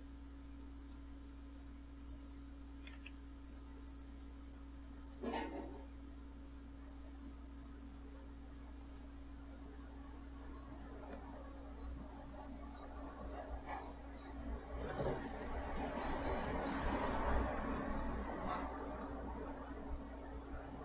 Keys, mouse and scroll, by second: 0.9 click, 2.1 click, 8.9 click, 13.1 click, 14.5 click, 15.9 click, 17.5 click, 19.0 click, 19.6-20.8 drag.